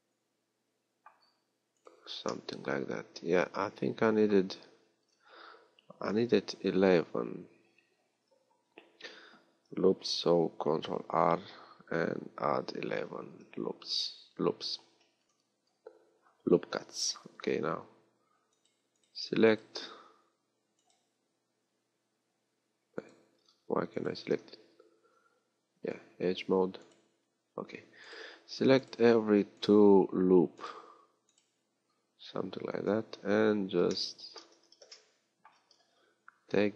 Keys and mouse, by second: 1.8-6.0 drag, 6.0 ctrl+z, 10.7 ctrl+r, 17.4 ctrl+Tab, 25.0 ctrl+Tab, 26.8-28.2 drag, 31.3-33.0 right drag, 33.0 KP_3, 34.6 z.